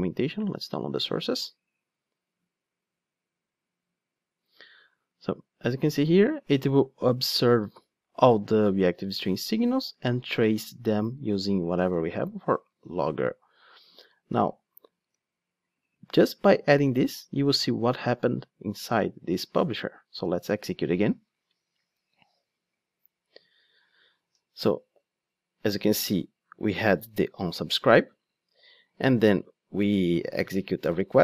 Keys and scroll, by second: 15.0 ctrl+Tab, 20.2 ctrl+d.